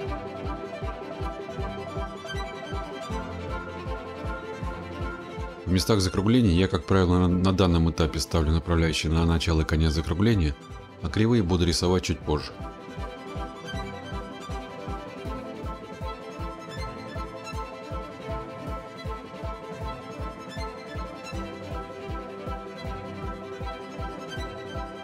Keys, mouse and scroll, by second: 0.3 click, 0.5-0.9 scroll, 1.2 click, 1.3 scroll, 1.8 click, 2.0 scroll, 3.1 click, 3.2-4.5 scroll, 4.2 click, 7.2 click, 11.6 click, 17.6 click, 17.8 click, 18.4 click, 20.4 click, 20.4-21.0 scroll, 21.0 click, 21.5 click, 22.1 click, 22.3-22.6 scroll, 23.2 click, 23.7 scroll, 24.6 scroll.